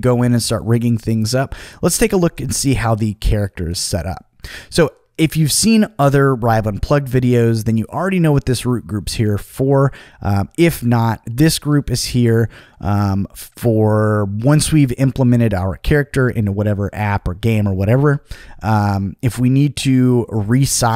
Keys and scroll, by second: 10.5 v.